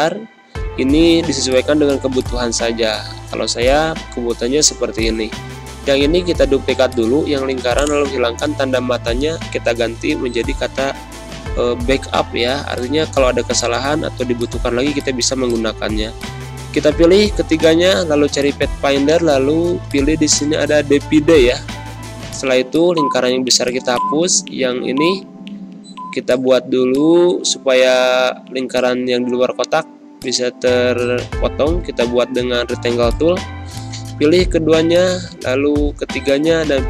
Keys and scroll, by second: 2.5 ctrl+z, 8.9-10.4 typing, 11.8-12.7 typing, 13.9 ctrl+z, 21.6 Delete, 23.0 Delete, 25.3 ctrl+z, 25.9 z, 26.6 space.